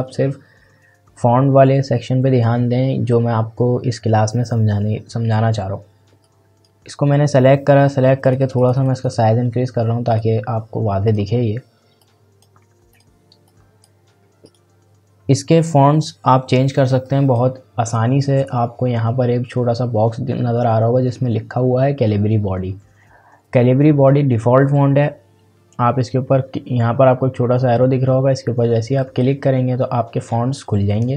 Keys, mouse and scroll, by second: 6.2-14.4 drag, 17.0 click, 29.0 click.